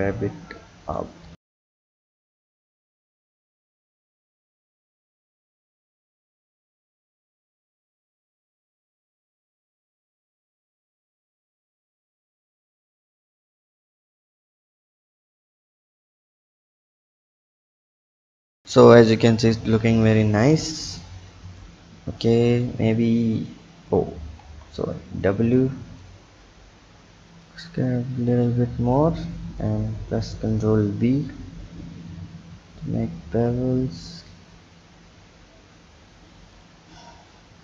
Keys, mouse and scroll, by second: 1.3 Tab, 1.6 click, 2.0-3.2 scroll down 1, 3.2 click, 5.7 Tab, 6.2-6.8 scroll up 1, 7.7 click, 10.6 Tab, 11.5 click, 12.1-13.4 scroll down 3, 13.4 click, 18.2-18.6 scroll down 3, 19.8-21.0 scroll up 3, 21.0 click, 21.8-22.3 scroll up 2, 22.3 click, 22.9 w, 24.4 Tab, 25.6 click, 26.4-27.4 scroll up 1, 27.4 click, 29.6 click, 31.0 ctrl+b.